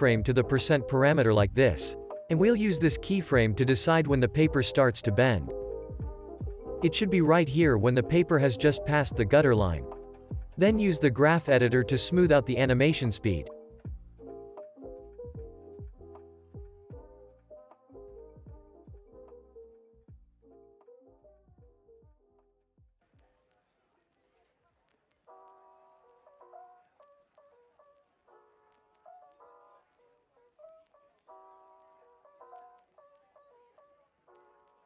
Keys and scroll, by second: 17.9-18.7 typing.